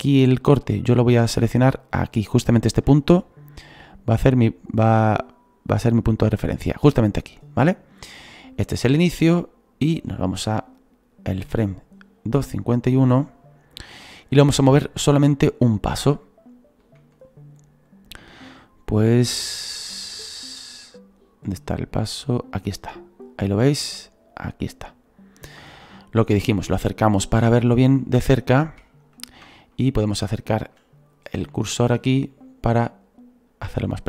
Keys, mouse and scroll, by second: 0.5 scroll up 4, 1.0 click, 1.0-3.5 shift+middle drag, 1.2-3.5 drag, 3.7-7.6 drag, 7.6-8.6 scroll down 6, 8.0-13.5 drag, 13.5 scroll down 2, 14.1-17.9 shift+middle drag, 17.9-20.9 drag, 26.2-27.1 scroll up 7, 27.1 shift+middle click, 27.6-28.0 scroll up 2, 28.0-31.1 shift+middle drag, 31.1-31.5 scroll up 8, 31.5 shift+middle click, 32.1-33.4 scroll up 4, 33.4 scroll up 1, 33.5 click.